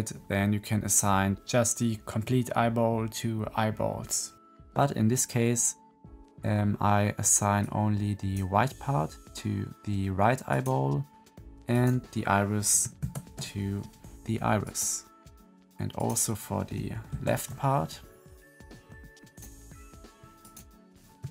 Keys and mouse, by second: 7.6 click, 8.4-10.4 middle drag, 10.6-11.6 middle drag, 11.6 click, 11.8 middle click, 12.9 ctrl+l, 15.9 middle click, 17.0 ctrl+l, 19.2 click, 20.4 click.